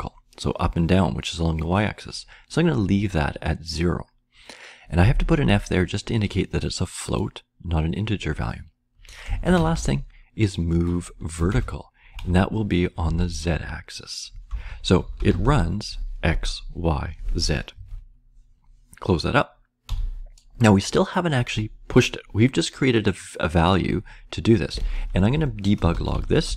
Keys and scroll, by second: 9.0-13.0 typing, 14.4-15.9 typing, 17.7 Right, 19.5-20.3 typing, 24.7 Return, 25.2 Return, 25.6-26.5 typing.